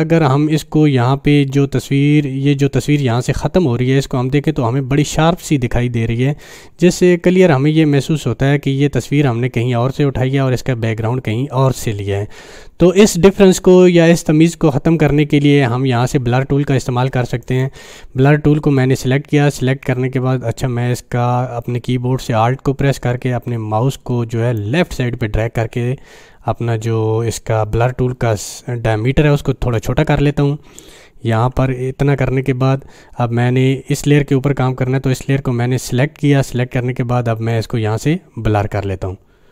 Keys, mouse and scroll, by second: 4.5-5.1 drag, 17.4 click, 22.2 alt+Num_Lock, 22.3 click, 24.6-29.0 alt+right drag, 37.5-39.5 drag.